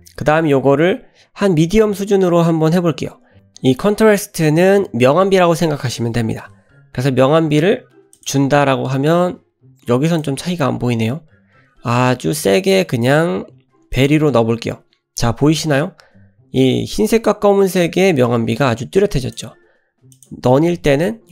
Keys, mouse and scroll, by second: 0.0-8.4 drag, 10.1-14.2 drag, 19.2-20.3 drag.